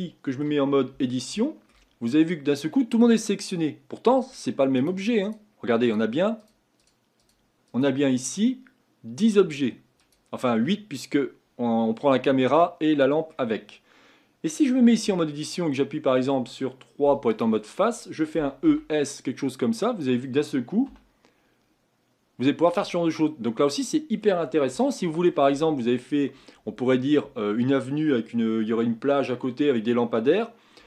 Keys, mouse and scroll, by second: 0.9 Tab, 1.4 shift+middle click, 1.9-2.5 scroll up 4, 2.5-4.1 middle drag, 4.1 Tab, 4.8 click, 5.2 click, 5.9 click, 6.4 click, 6.8 click, 7.2 click, 7.7 click, 10.0 click, 12.1-12.5 scroll down 1, 12.5-13.6 middle drag, 13.6-15.0 scroll up 2, 15.0 Tab, 17.0 3, 17.3 click, 18.4 e, 20.9 e, 23.1-23.5 scroll down 3, 23.5-28.0 middle drag.